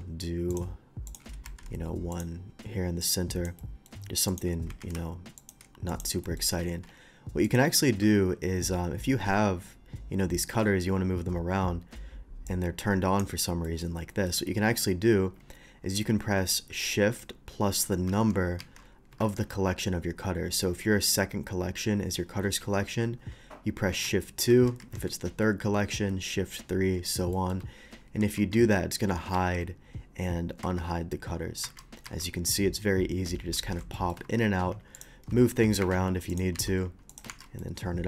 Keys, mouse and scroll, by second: 0.1 d, 0.5 click, 1.1 click, 1.4 shift+v, 2.1 click, 3.0-3.5 drag, 3.6 middle drag, 4.3 click, 4.7 q, 5.4 click, 5.9 click, 6.2 middle click, 6.8 alt+v, 7.4 click, 12.5-13.2 drag, 13.6 middle click, 14.1 middle click, 18.3 shift+2, 18.6 shift+2, 24.5 shift+2, 24.8 shift+2, 27.3 middle click, 28.2 shift+2, 28.6 shift+2, 32.1 shift+2, 33.3 shift+2, 33.9 middle drag, 34.2 shift+2, 34.9 click, 34.9 shift+2, 35.3 g, 35.8 Escape, 36.3 click, 36.4 g, 37.1 click, 37.1 g, 37.6-38.0 shift+middle drag.